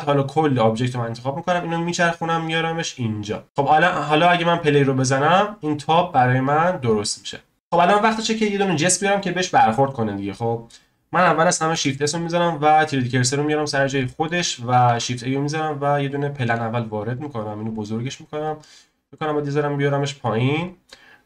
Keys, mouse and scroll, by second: 0.1 click, 1.8 click, 3.4 click, 4.6-6.2 drag, 6.2-7.3 scroll up 1, 7.5-9.6 scroll down 1, 9.9 scroll up 2, 10.5 scroll down 1, 11.7 shift+s, 13.7-14.0 scroll up 1, 14.0-14.9 shift+middle drag, 14.9 shift+a, 16.4 s, 18.3 scroll down 3, 18.6-19.8 middle drag, 19.8 click, 20.6 click.